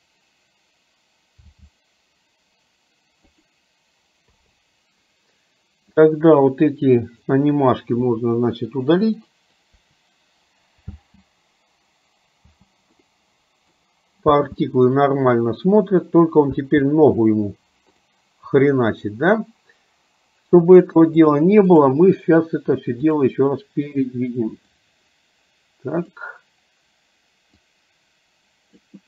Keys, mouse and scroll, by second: 1.5 g, 4.5 i, 6.1-7.3 drag, 8.3 Delete, 9.4 drag, 9.9 Delete, 11.1 space, 12.8 space, 13.3-14.1 middle drag, 16.8 space, 18.1 click, 21.4 click, 24.9-26.5 drag, 28.0-29.0 drag.